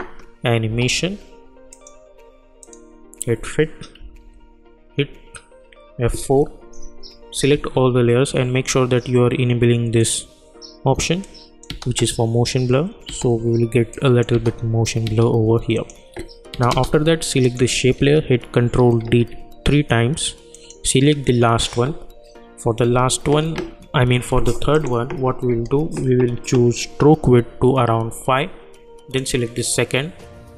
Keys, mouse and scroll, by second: 1.7 click, 4.0 -, 4.2 -, 6.2 F4, 7.5 ctrl+a, 10.0 click, 10.1 click, 11.7 space, 13.9 click, 14.3 space, 15.7 click, 16.5 space, 17.4 click, 18.6 ctrl+d, 20.5 click, 24.7 click, 29.1 click.